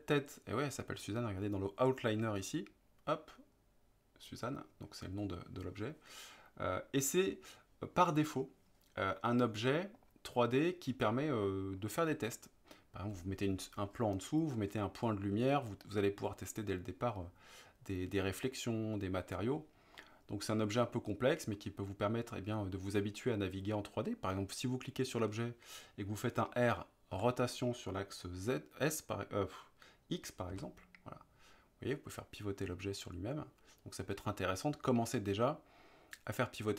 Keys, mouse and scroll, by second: 10.0 click, 10.6-11.8 middle drag, 20.1-23.1 middle drag, 27.1 r, 30.5 x.